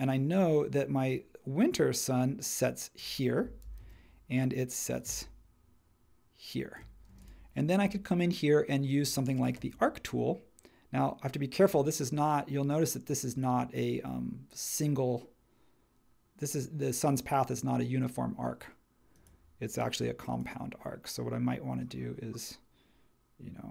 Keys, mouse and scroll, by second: 3.6 super+c, 3.8 super+v, 7.1 space, 9.6 a.